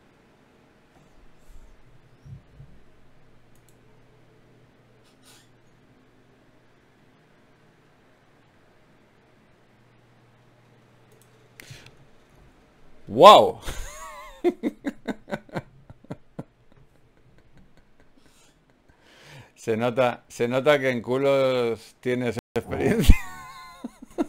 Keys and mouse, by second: 7.1 ctrl+r, 10.2 click, 13.1 s, 17.6 super+click, 18.5-19.5 drag, 18.5 s, 20.6 a, 21.9 ctrl+n.